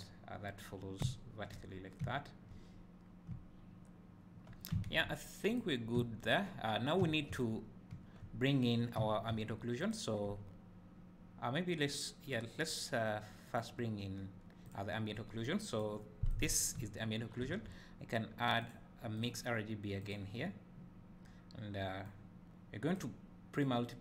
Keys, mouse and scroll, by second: 1.0 `, 1.9 scroll down 1, 2.1 `, 2.8 scroll up 2, 3.1 scroll down 1, 3.3 `, 5.6 click, 6.0 `, 9.9 click, 12.3 click, 13.5 click, 15.5 click, 16.3 click, 22.1-24.0 drag.